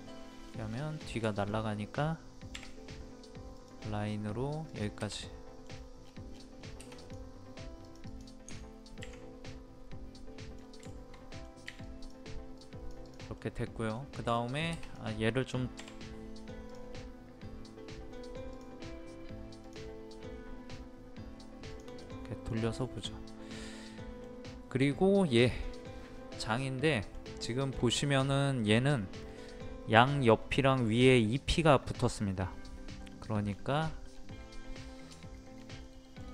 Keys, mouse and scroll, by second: 0.6 scroll down 1, 1.3 shift+middle click, 2.5 |, 3.5 click, 5.2 middle click, 5.7 scroll down 1, 6.3 scroll up 1, 6.5 scroll down 1, 7.0 click, 9.5 middle click, 10.4-10.8 scroll down 2, 10.9 shift+middle click, 11.8-13.0 drag, 13.3 middle click, 14.0 scroll down 1, 14.3 shift+middle click, 14.8-15.8 drag, 22.0 middle click, 22.8 shift+middle click, 23.2-23.5 scroll up 1, 23.8-24.8 middle drag, 26.1 scroll down 1, 26.8 middle click, 27.4 shift+middle click, 27.9-28.2 scroll up 1, 28.5-29.8 middle drag, 32.6-33.0 scroll down 1, 33.5 scroll up 1, 33.7-34.1 scroll down 1, 35.3 typing, 35.8 middle click.